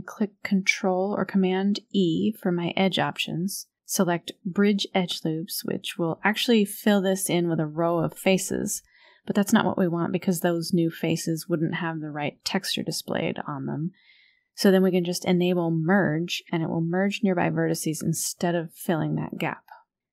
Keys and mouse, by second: 0.7 KP_1, 2.2 ctrl+e, 11.1 click, 18.5 a.